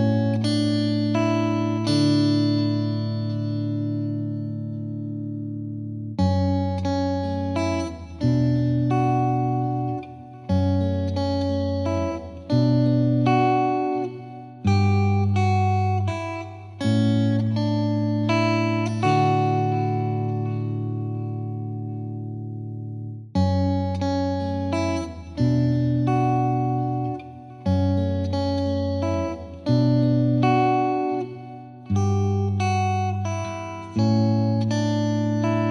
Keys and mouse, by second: 2.0 click, 2.9 click, 4.1 click, 5.0 4, 5.7 Return, 10.6 click, 14.2-15.2 drag, 18.5 click, 22.5 click, 23.4 typing, 24.1 Return, 26.7 click, 27.1 click, 28.9 click, 31.3 click, 34.7 click.